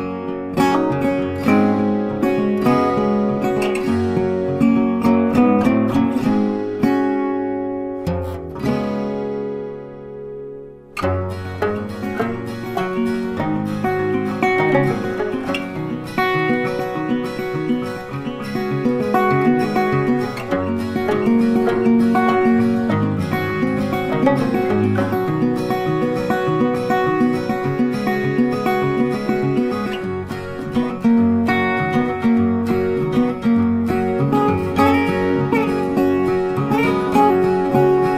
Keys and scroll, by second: 6.6 ctrl+t, 14.6 ctrl+t, 31.3 ctrl+d, 37.4 Delete.